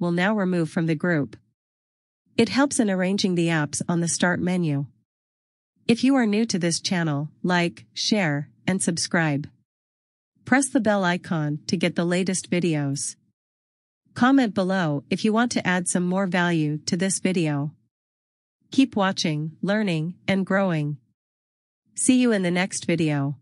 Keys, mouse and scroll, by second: 11.2 click.